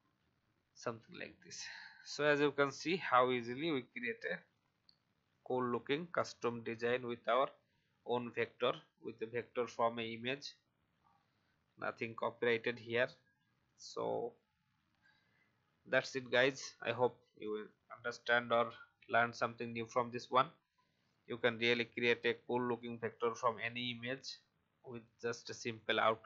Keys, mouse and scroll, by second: 0.1 shift+Left, 1.2 alt+scroll down 1, 2.1-2.4 alt+scroll down 1, 2.6 click, 3.3-3.7 scroll up 1, 3.9-4.2 alt+scroll down 1, 4.4-6.4 drag, 6.4 Delete, 7.5-7.8 alt+scroll up 1, 9.0 click, 10.9-11.2 shift+scroll up 1, 12.0-12.3 alt+scroll down 1, 12.7-15.7 drag, 16.6-17.0 alt+scroll up 1, 17.6 click, 19.6-22.6 drag, 22.6 v, 23.1 click.